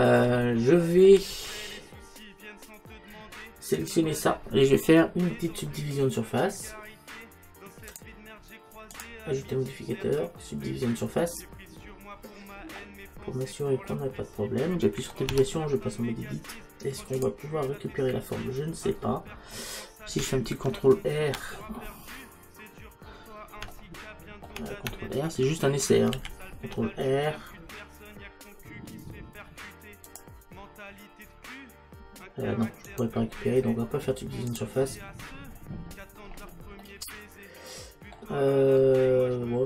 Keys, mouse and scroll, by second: 3.8-7.9 right drag, 7.9-10.9 drag, 13.1-15.2 middle drag, 15.3 Tab, 18.9-21.5 middle drag, 19.6-20.8 scroll up 1, 21.8-25.5 middle drag, 26.2 ctrl+r, 34.5 click, 38.8-39.6 middle drag.